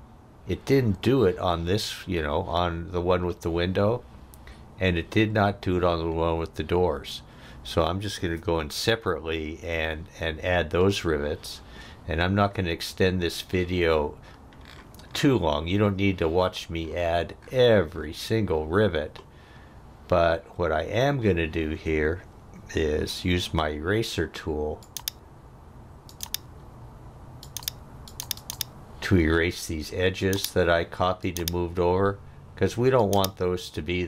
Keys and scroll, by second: 23.4 e.